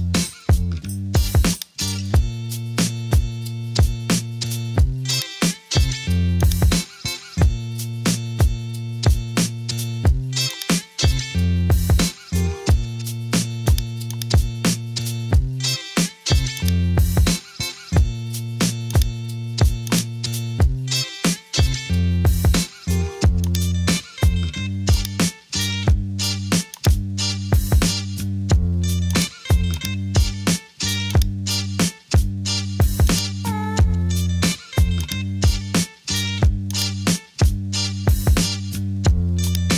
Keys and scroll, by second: 9.1-9.7 typing, 11.7 typing, 17.8 super+t, 21.5 Return.